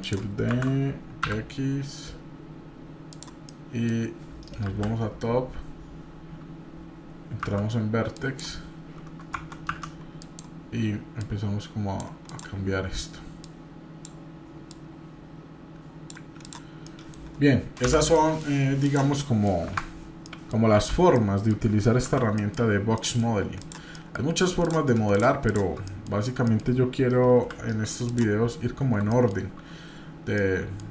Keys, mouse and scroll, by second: 0.5 shift+d, 3.5 middle click, 4.6 KP_7, 5.2 scroll up 1, 6.0-6.8 scroll down 2, 7.4 1, 8.2 click, 9.3 Tab, 9.7 1, 10.2 click, 11.2 click, 12.3 click, 13.4 click, 14.7-16.1 drag, 16.4 click, 16.8 middle click, 17.2-17.6 scroll down 1, 17.9 p, 18.8 click, 19.2 middle click, 19.6 \, 20.2 middle click, 20.7 Tab, 21.2-21.6 middle drag, 22.0 shift+z, 22.4 middle click, 22.7 scroll up 2, 23.0 middle click, 23.6 click, 23.9 middle click, 24.6 click, 25.1 shift+click, 25.8 middle click, 26.5 middle click, 27.3 KP_7, 28.0 click, 28.4 scroll up 2, 29.1 shift+middle click, 29.8-30.3 scroll down 2, 30.3 middle click, 30.8 scroll down 1.